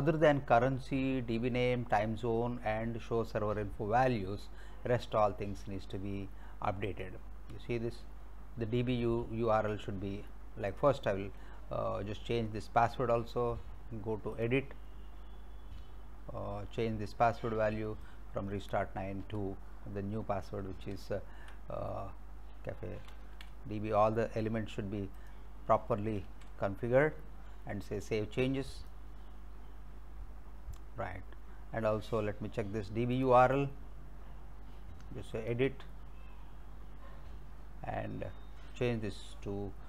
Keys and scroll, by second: 19.3 BackSpace, 21.0 alt+Tab, 23.1 ctrl+c, 26.3 ctrl+v.